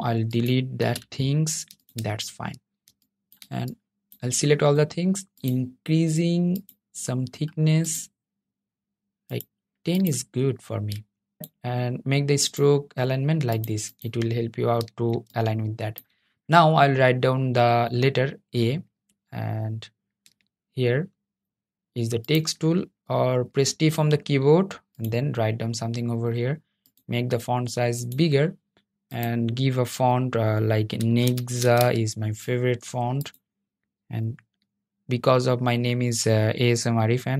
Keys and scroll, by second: 0.2 BackSpace, 23.5 t.